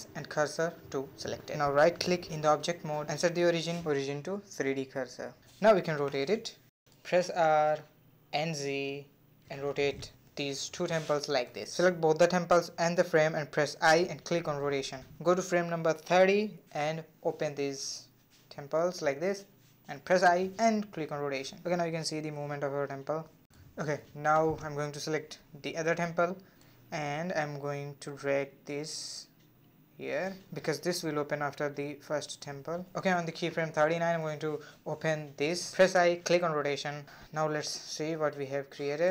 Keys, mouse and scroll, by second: 0.2 Tab, 5.4 r, 7.0-7.7 scroll down 5, 7.0 middle drag, 7.4 middle drag, 7.7 middle click, 7.9 r, 8.7 scroll down 1, 8.7 middle click, 8.9 click, 9.2 r, 9.9 middle drag, 10.2 scroll up 3, 10.4-11.1 middle drag, 11.1 shift+click, 12.2 shift+click, 14.9-16.7 drag, 17.1 middle click, 17.2 KP_7, 17.7 r, 21.7-24.7 drag, 26.6 click, 27.8 click, 29.9-32.7 drag, 32.7 r, 34.5 |, 36.1-38.7 middle drag, 38.7-39.1 drag.